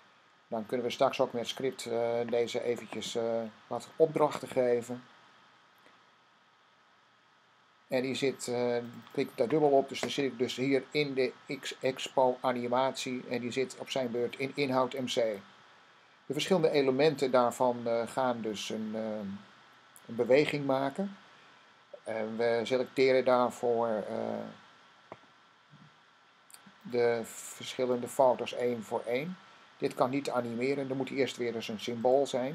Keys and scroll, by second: 0.0-0.1 typing.